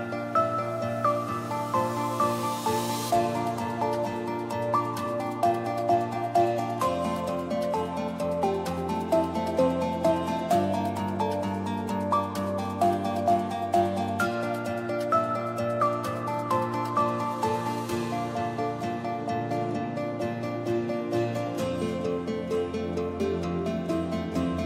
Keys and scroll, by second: 10.4 q, 22.4-23.4 typing.